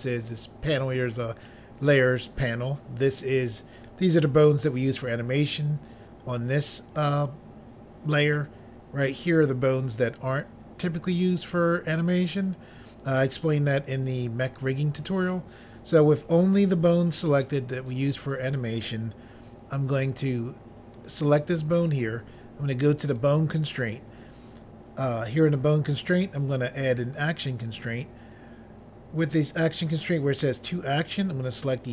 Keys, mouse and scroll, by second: 21.0 click, 21.1 click, 23.2 click, 23.4 click, 25.9 click, 26.0 click, 27.2 click, 27.3 click, 31.1 click, 31.2 click.